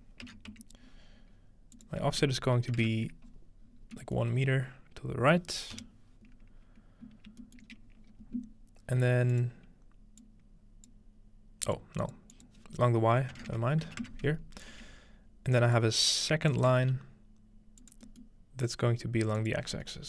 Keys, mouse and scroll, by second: 1.7 click, 3.6 scroll down 1, 3.8 scroll up 1, 4.0-5.8 middle drag, 4.5 scroll down 2, 5.0 scroll down 2, 7.4-8.6 shift+middle drag, 7.7-9.3 scroll up 1, 9.3-12.2 drag, 9.6-10.9 scroll down 1, 12.3 click, 15.5 click, 16.5 click, 16.8 shift+d, 17.8 shift+click, 18.1-20.0 middle drag, 19.4 click.